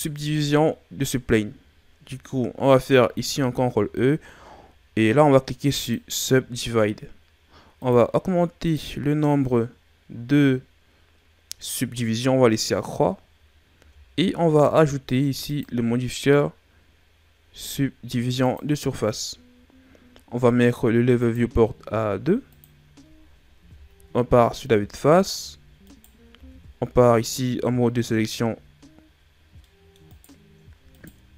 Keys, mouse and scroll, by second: 3.0 ctrl+e, 7.7 click, 13.7 Tab, 15.4 click, 21.1 click, 23.5 KP_1, 25.1 a, 25.8 right click, 26.2 Tab, 26.7-27.5 scroll up 2, 27.5 ctrl+scroll up 2, 29.5 middle click, 30.0 right click, 30.9 shift+right click.